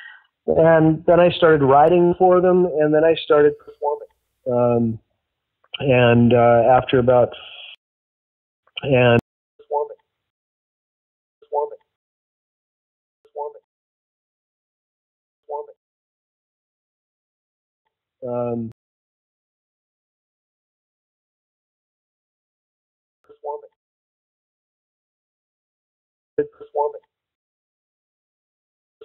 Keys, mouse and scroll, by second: 0.1 click, 0.7-1.9 drag, 2.2 click, 3.1 click, 3.6 click, 6.4-7.6 drag, 7.7-10.3 typing, 8.3 ctrl+shift+Delete, 9.5 click, 10.6 click, 11.3 space, 11.9 space, 12.0 click, 12.2 click, 13.2 space, 13.6 space, 14.6 click, 15.4 space, 16.9 click, 17.8 space, 18.6 space, 19.4-21.1 drag, 21.5 click, 22.1-23.1 drag, 23.1 space, 24.4-25.7 drag, 26.2 click, 26.3 space, 27.3 space, 27.7 click, 27.9 click, 28.9 space.